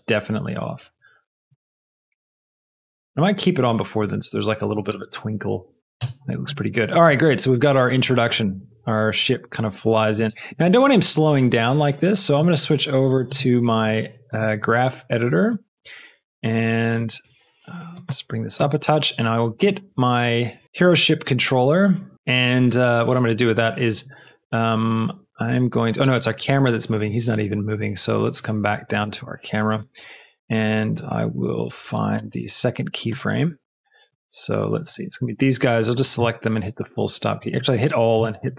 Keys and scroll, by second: 1.5 space, 4.2 space, 4.8 space, 7.0 space, 10.3 space, 34.9 b, 37.4 a.